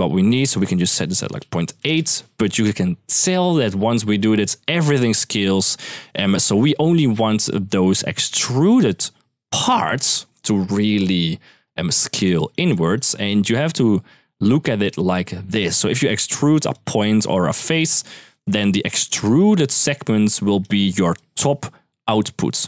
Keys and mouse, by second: 0.3-1.6 drag, 8.5-9.9 drag, 12.0 click, 12.3 click, 12.7-13.1 drag, 15.6-22.6 typing, 18.1 click, 18.8 click, 19.5 click, 20.9 click.